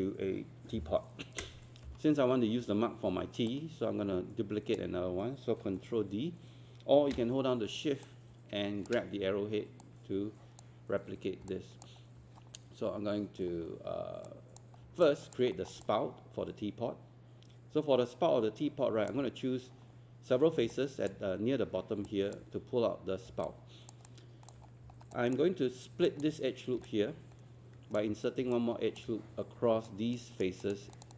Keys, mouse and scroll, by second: 1.9 w, 3.5-5.4 drag, 8.0 shift+click, 9.8-11.4 drag, 11.5 alt+click, 13.5-14.3 scroll up 1, 14.3 click, 15.0 alt+click, 15.6 alt+middle click, 20.7 alt+click, 23.2 scroll up 1, 23.5 alt+click, 24.0 alt+click, 24.6 scroll up 1, 25.2 alt+click, 26.1 alt+click, 26.9 alt+click, 28.6 alt+click, 29.9 right click, 30.6 click, 31.0 shift+click.